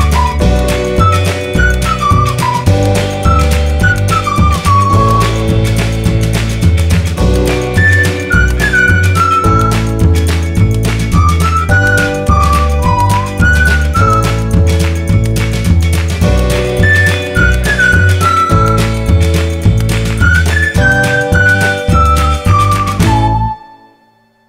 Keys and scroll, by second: 1.7 e, 1.8 space, 19.4 r, 19.6 space, 20.5 5, 20.8 Return, 23.6 Escape, 23.9 space.